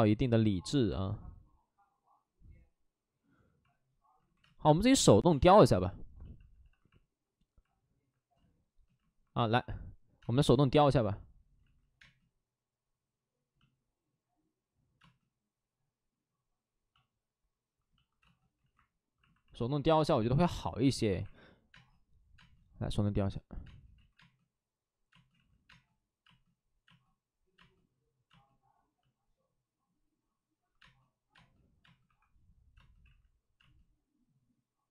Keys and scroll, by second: 4.1 ctrl+z, 4.3 space, 4.6 1, 5.2 space, 6.2 shift+f, 8.3 space, 11.5 ctrl+z, 11.9 space, 18.5 ctrl+z, 20.7 space, 21.0 1, 21.6 space, 23.9 ctrl+z, 24.1 space, 25.2 ctrl+z, 25.5 space, 32.0 1, 32.6 space, 32.9 ctrl+z, 33.5 space.